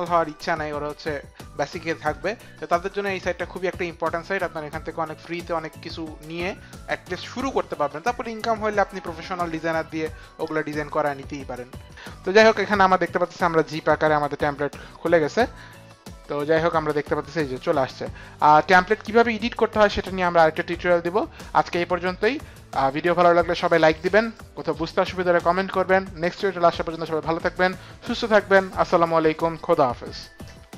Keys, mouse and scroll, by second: 11.9 click, 13.7 click, 14.5 click, 16.7 click.